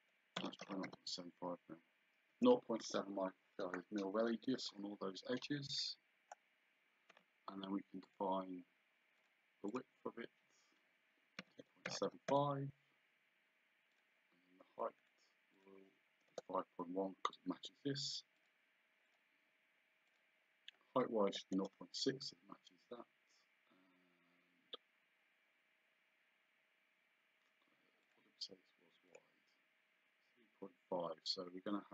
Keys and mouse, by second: 0.4 BackSpace, 0.7 KP_7, 2.3 KP_Enter, 8.1 click, 9.2 click, 11.4 KP_2, 12.3 KP_Enter, 14.0 click, 15.0 click, 16.3 KP_Enter, 18.4 click, 21.6 Return, 28.1 click.